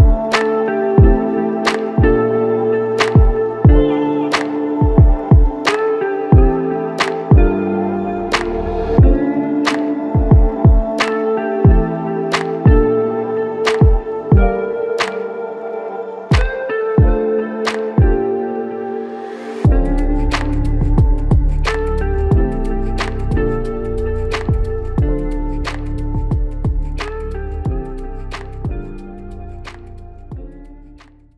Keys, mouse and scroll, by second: 1.1 ctrl+alt+click, 2.4 alt+click, 4.2 typing, 7.2 typing, 8.3 alt+click, 11.5 alt+click, 12.4 double click, 13.3 shift+click, 13.6 shift+double click, 16.0 double click, 16.9 alt+click, 18.7 ctrl+click, 20.5 shift+click, 21.6 ctrl+click, 22.1 ctrl+click, 23.6 double click, 24.1 alt+click, 25.1 shift+click, 26.1 shift+click, 27.6 ctrl+alt+click, 28.3 alt+click, 30.3 alt+shift+click.